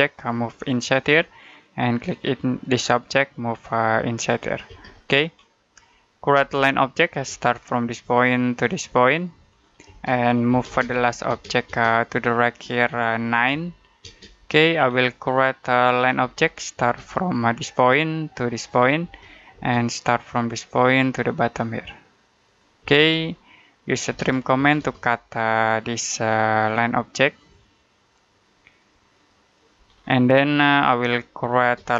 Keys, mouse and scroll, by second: 0.0 click, 4.5 space, 5.2-5.7 scroll up 1, 5.7 middle click, 6.2 l, 6.9 space, 8.0 click, 9.7-11.1 typing, 11.8 click, 13.4 9, 13.9 space, 14.7-15.2 scroll up 1, 15.2 middle click, 16.1 l, 16.6 space, 17.6 click, 18.9 space, 20.2 click, 22.7 space, 23.3 middle click, 23.7-24.5 typing, 25.3 click, 29.8-30.2 scroll down 1, 30.2 middle click, 30.5-31.0 scroll up 1, 31.0-31.4 scroll down 1, 31.4 space.